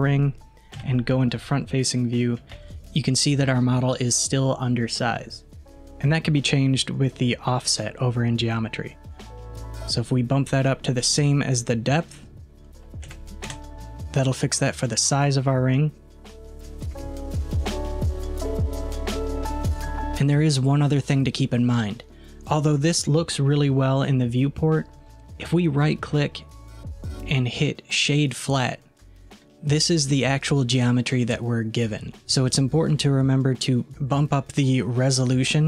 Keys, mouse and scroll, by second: 0.8 KP_1, 1.8 scroll up 2, 2.6 alt+z, 12.0-13.9 drag, 16.9 alt+z, 17.9-18.4 scroll down 2, 18.4-19.9 middle drag, 25.9-28.9 right drag.